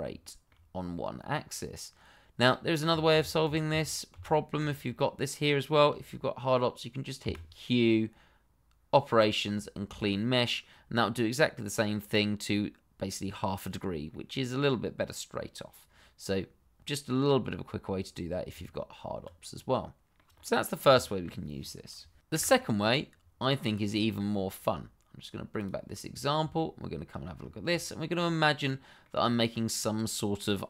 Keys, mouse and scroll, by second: 0.2 shift+middle click, 0.3 middle click, 0.3 shift+middle click, 3.1 ctrl+z, 7.2 q, 9.8 click, 13.7 scroll down 1, 14.1 middle click, 18.5 Tab, 19.5 scroll down 1, 19.8 middle click, 20.3-20.9 scroll up 1, 21.0 shift+middle click, 21.1 middle click, 22.3 Delete, 23.1-23.8 scroll down 1, 24.0 shift+middle click, 25.5 click, 26.0 scroll down 1, 26.5 shift+middle click, 27.3-27.8 scroll up 1, 27.8 shift+middle click, 28.7 middle click, 29.4 shift+middle click.